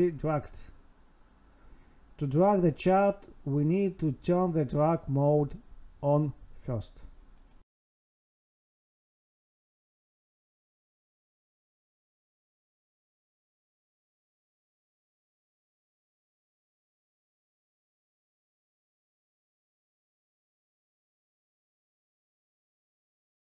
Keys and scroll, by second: 0.4 Escape, 13.6 Tab, 15.1 ctrl+s, 21.9 Right.